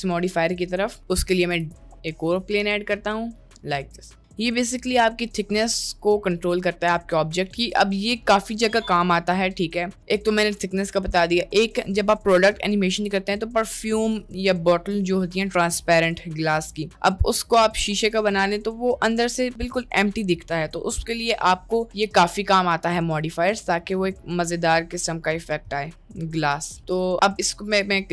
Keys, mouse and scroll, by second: 0.7 middle click, 1.3 a, 1.5 x, 1.9 shift+a, 2.8 middle click, 3.5 middle click, 4.6 middle click, 23.4 middle click, 26.1 middle drag, 26.7 middle click.